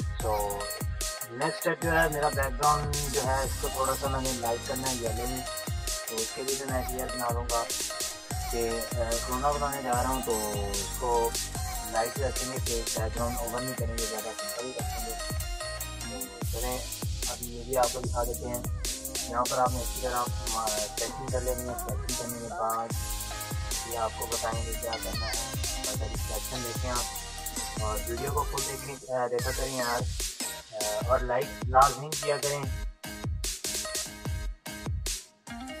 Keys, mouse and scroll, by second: 1.1 ctrl+shift+e, 1.1 click, 1.1 click, 2.1 ctrl+-, 4.1 ctrl+-, 4.4 ctrl+=, 6.1 click, 6.1 click, 7.0 ctrl+-, 7.9 shift+w, 9.5-11.1 drag, 15.6-17.1 drag, 17.6 space, 18.4 [, 19.3 alt+click, 21.1 space, 21.3 click, 24.5 click, 25.0 space, 26.1 click, 26.7 space, 26.8 click, 27.3 space, 28.9-32.7 alt+drag, 33.1-35.8 typing, 33.2 click, 33.8 click, 34.5 click, 35.4 click.